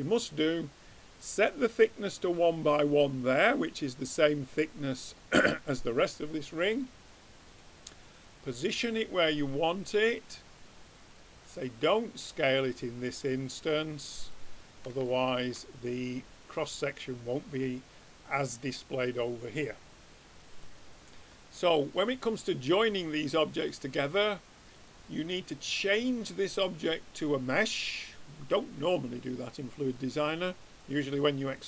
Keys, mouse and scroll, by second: 0.0-1.9 drag, 3.5-5.3 middle drag, 6.7-8.7 drag, 8.7-10.7 drag, 13.6-15.2 drag, 15.1 middle click, 15.7-16.9 middle drag, 21.3-24.8 middle drag, 24.8-26.5 drag, 30.1-31.6 drag.